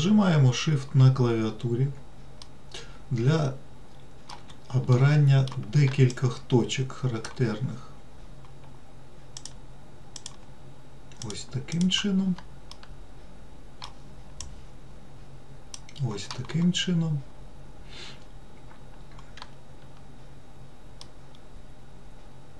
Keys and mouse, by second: 2.8-4.6 middle drag, 5.2 middle click, 6.5-7.6 shift+drag, 9.7 shift+click, 11.5 shift+click, 13.0-14.2 middle drag, 14.9-16.1 shift+drag, 21.3-22.5 middle drag.